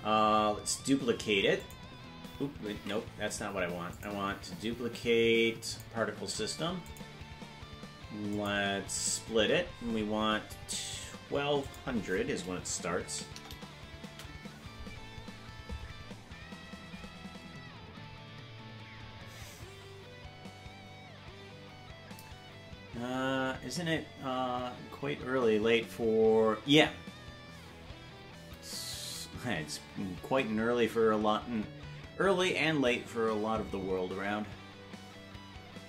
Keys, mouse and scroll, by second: 1.6 click, 3.2 ctrl+z, 3.9-5.8 drag, 6.9 click, 8.3 click, 11.6-15.1 drag, 13.5 KP_0.